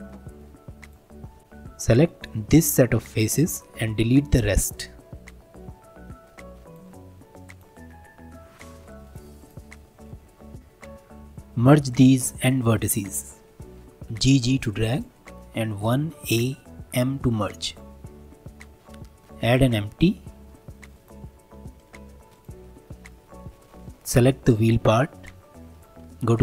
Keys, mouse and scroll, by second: 0.1 middle click, 0.8 click, 1.5-2.5 drag, 5.3 3, 5.8 shift+click, 7.3 shift+click, 7.9-8.9 middle drag, 8.9 shift+click, 9.3 middle click, 9.4 click, 9.7-10.3 middle drag, 10.3 scroll up 1, 10.5 1, 11.9 click, 12.8 shift+click, 13.1 middle click, 14.1 g, 15.8 1, 16.2 a, 16.9 m, 18.0 scroll down 2, 18.3 middle click, 18.8 shift+a, 21.5 scroll down 3, 21.8-22.3 middle drag, 22.3 drag, 22.8 scroll up 2, 23.1-24.2 middle drag, 24.2 click, 25.7 click.